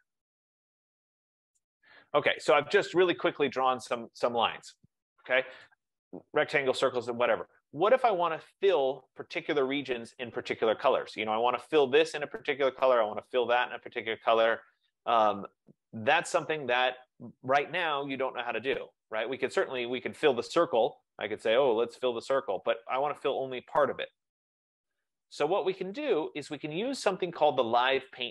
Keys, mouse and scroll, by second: 1.6 click, 3.8 click, 5.8 click, 20.1 click, 21.1 F15, 22.1 click, 26.1 click, 28.2 click.